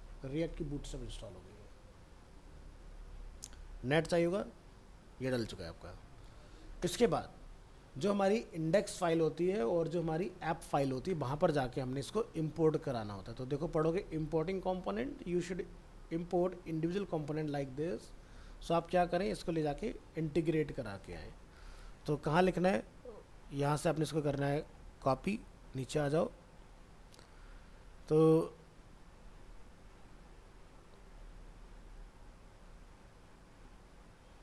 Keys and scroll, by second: 6.2 alt+Tab.